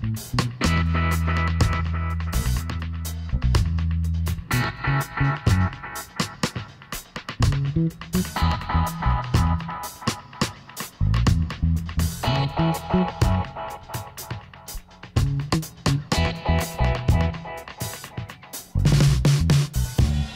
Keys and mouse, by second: 1.0 r, 2.5 s, 4.1 g, 5.6 click, 7.3-9.0 drag, 8.0 g, 10.1-11.2 middle drag, 11.3 ctrl+r, 13.3 g, 15.1 g, 16.2 click, 17.1-18.3 middle drag, 18.3 ctrl+r, 18.7 click, 19.4-20.3 drag, 20.1 g.